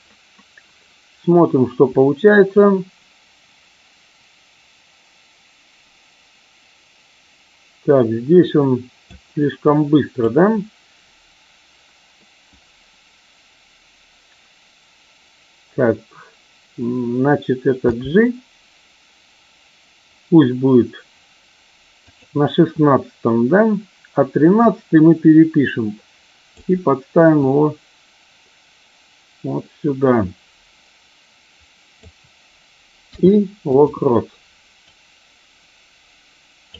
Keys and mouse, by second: 2.5-9.1 drag, 9.5-10.3 drag, 17.8 g, 22.0 click, 24.6-26.5 drag, 27.4-32.0 drag, 34.8-36.7 drag.